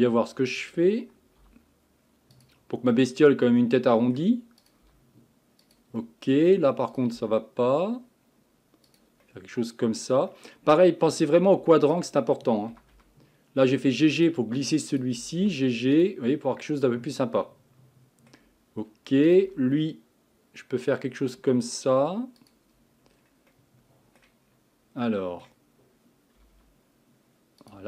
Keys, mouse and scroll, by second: 0.5 click, 1.4 g, 3.0-4.6 middle drag, 4.6 click, 4.9 g, 6.0 middle click, 6.9 click, 7.2 g, 9.2-10.9 middle drag, 10.9 scroll up 1, 11.9 click, 12.7 g, 14.9 click, 15.2 g, 16.3-16.6 scroll down 4, 16.6-19.3 middle drag, 19.3 click, 19.5 g, 23.2-23.5 scroll down 1, 23.5 middle click, 24.4-25.0 scroll up 4, 25.0-26.4 middle drag, 26.4 g.